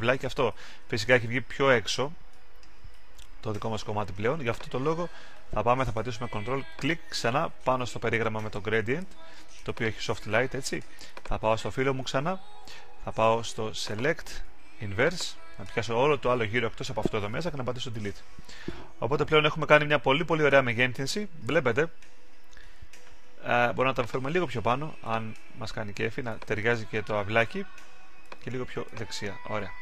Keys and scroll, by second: 19.2 super+d.